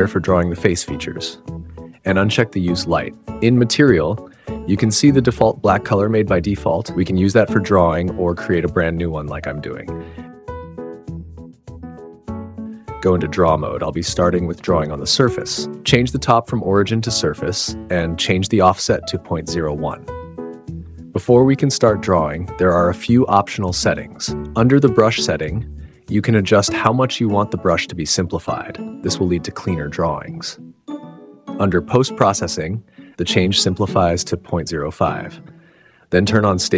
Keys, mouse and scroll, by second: 2.7 middle click, 5.8 middle click, 6.9 click, 9.3 click, 10.0 click, 12.7 click, 14.5-19.2 drag, 23.7 click, 26.0-27.0 drag, 30.2 click, 31.9 click, 33.5-34.8 drag.